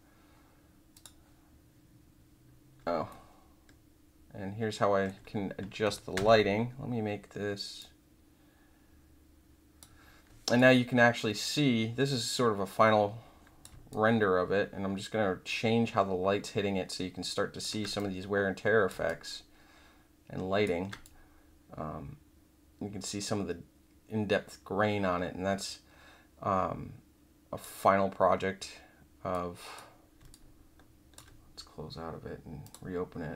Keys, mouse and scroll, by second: 0.9 click, 3.0-5.0 alt+middle drag, 6.1 Escape, 7.7-9.8 drag, 10.5-13.6 drag, 13.9-17.6 alt+drag, 17.9 click, 19.0-20.6 alt+drag, 21.0-27.6 drag, 29.3 click, 30.3 alt+click, 32.6 click.